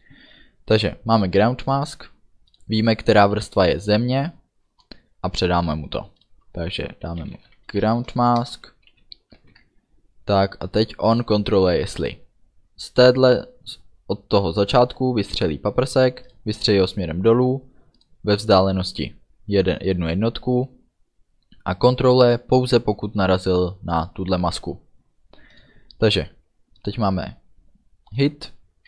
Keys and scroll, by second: 7.2 g, 7.3 r, 7.4 o, 8.5 Return, 9.0 End, 9.4 ctrl+s.